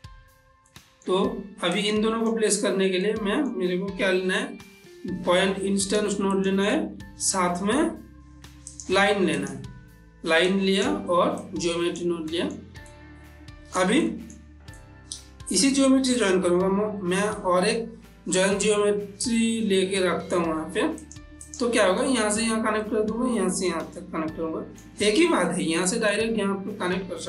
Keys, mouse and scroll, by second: 0.6 middle click, 1.7-3.0 drag, 3.0 middle click, 4.0 shift+a, 5.8 click, 7.0 shift+a, 8.6 click, 10.4-12.3 drag, 12.3 middle click, 12.9-16.4 ctrl+middle drag, 16.4 shift+a, 21.0 click, 21.8 middle click, 22.8 middle click, 24.0-25.6 middle drag, 25.8 middle click.